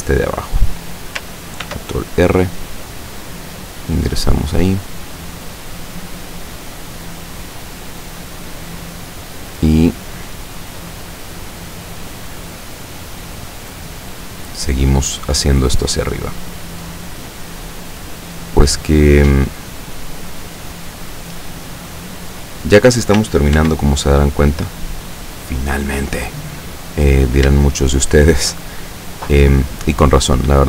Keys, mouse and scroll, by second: 0.6 click, 1.7 ctrl+r, 2.7 click, 4.5 click, 5.4 right click, 6.5 click, 8.4 click, 10.0 right click, 10.5-11.9 drag, 12.3 right click, 12.7-14.8 drag, 15.2 right click, 15.7-17.9 drag, 18.5-19.9 drag, 20.5-22.7 drag, 23.6 ctrl+r, 24.5 click, 25.7 click, 27.4 shift+right click, 27.8 shift+right click, 28.3 shift+right click, 28.9-30.6 shift+drag.